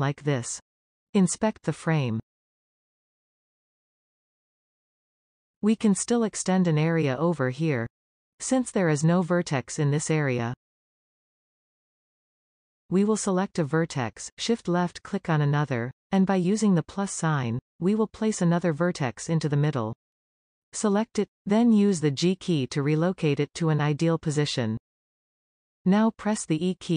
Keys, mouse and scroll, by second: 1.0-3.1 middle drag, 3.2 shift+middle click, 3.5 scroll down 2, 3.7 middle click, 4.1 scroll down 2, 4.3 shift+middle click, 5.1 scroll up 1, 5.2-10.0 shift+middle drag, 10.4-11.6 scroll up 1, 11.7-13.4 shift+middle drag, 13.4 click, 15.8 shift+click, 19.0-21.2 drag, 22.8 g.